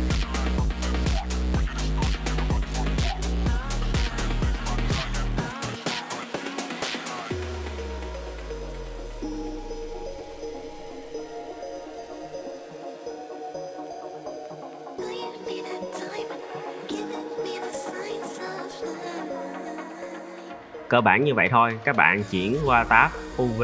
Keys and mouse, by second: 0.4 ctrl+e, 0.8 click, 1.1-2.1 middle drag, 2.5 middle click, 2.6 click, 2.8 shift+click, 3.1 ctrl+e, 3.6 shift+middle click, 3.8 middle click, 4.0 shift+middle click, 4.4 middle click, 4.7 alt+click, 5.0 middle drag, 5.5-5.8 shift+drag, 5.9 middle drag, 6.3 shift+click, 6.6 ctrl+e, 7.1 shift+middle click, 7.3 middle drag, 7.8 alt+click, 8.2 alt+click, 8.4 middle drag, 8.7 shift+middle click, 8.8 middle drag, 9.2 shift+middle click, 9.4 middle drag, 9.7 middle drag, 10.0 ctrl+e, 10.4 drag, 10.9 shift+click, 11.1 drag, 12.1 ctrl+z, 13.1 click, 14.0 click, 14.4 ctrl+e, 14.9 middle drag, 15.2 drag, 15.4-16.3 middle drag, 16.4 middle drag, 16.8 shift+drag, 17.2 middle click, 17.4 shift+click, 17.5 middle drag, 18.2-18.5 middle drag, 18.7 ctrl+e, 19.5 middle drag, 19.9 KP_1, 20.3-20.7 shift+drag, 21.4 a.